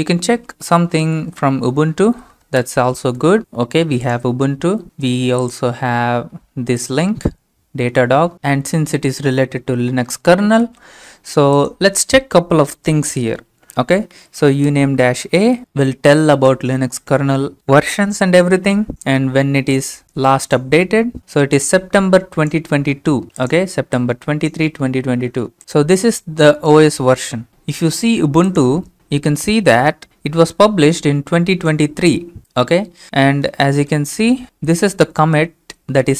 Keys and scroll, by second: 0.3 Return, 0.5-2.7 typing, 11.0 alt+Tab, 13.8-16.1 typing.